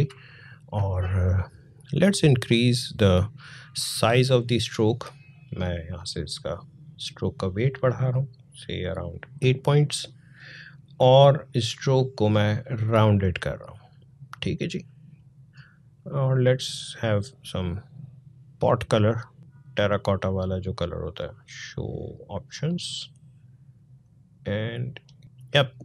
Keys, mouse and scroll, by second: 0.0 click, 0.4 space, 2.5 click, 5.8 click, 9.0 click, 17.0-25.8 drag.